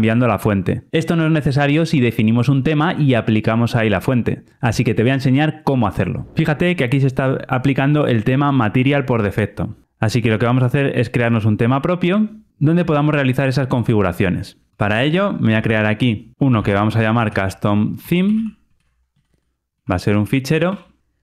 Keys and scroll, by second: 14.7 super+n.